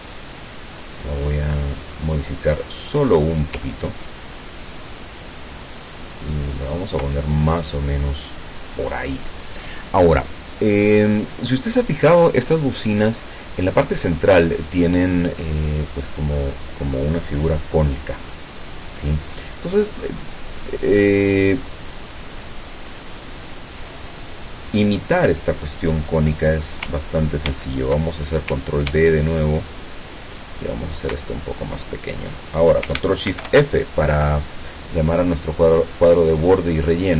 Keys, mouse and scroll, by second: 1.0 click, 3.8-7.1 ctrl+drag, 27.5 ctrl+d, 29.2-31.2 ctrl+shift+drag, 33.3 ctrl+shift+f.